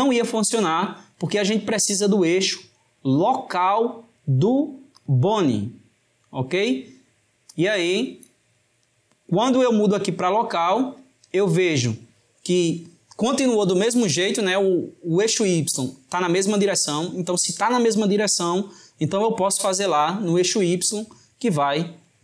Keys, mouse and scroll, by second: 2.2-5.3 drag.